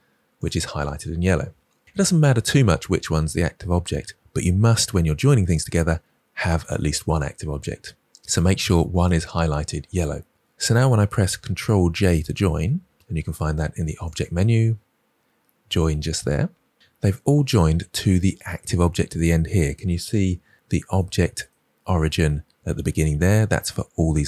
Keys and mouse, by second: 12.2 ctrl+j, 14.1-16.4 drag.